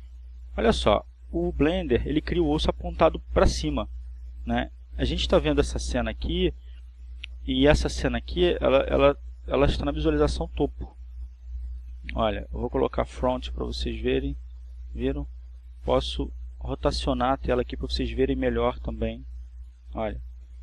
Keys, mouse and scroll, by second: 3.1 click, 13.6 click, 17.3 click, 19.1-20.6 middle drag.